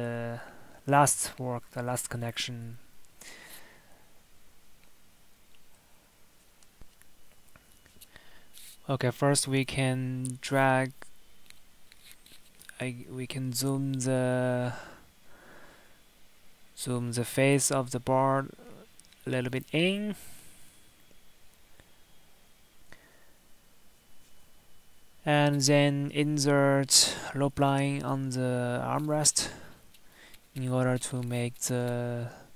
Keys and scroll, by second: 3.7 Tab, 5.3 Tab, 30.3 Escape.